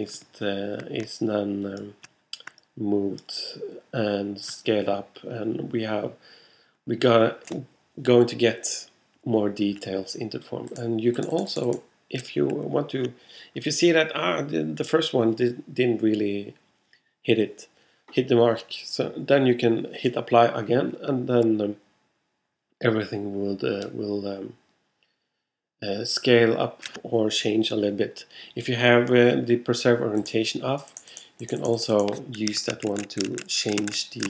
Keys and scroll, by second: 32.6 super+z.